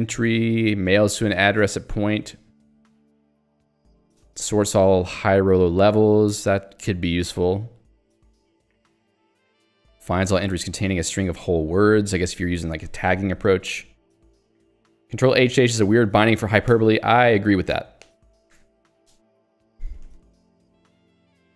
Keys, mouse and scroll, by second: 0.4 j, 3.5 k, 3.8 j, 9.9 k, 19.8 j.